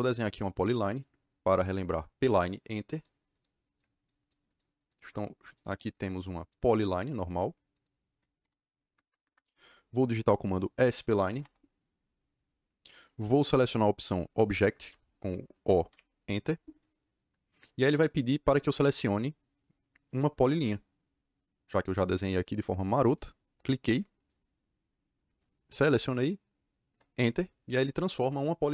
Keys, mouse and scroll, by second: 2.9 click, 3.3 click, 3.6 click, 3.9 click, 4.1 click, 4.4 click, 4.7 click, 5.0 click, 5.3 click, 5.9 click, 6.3 click, 6.7 click, 7.7 click, 8.2 KP_Enter, 8.8 Escape, 8.9 Escape, 9.1 Escape, 10.8-11.7 typing, 15.8 o, 16.2 KP_Enter, 24.1 click, 26.8 KP_Enter.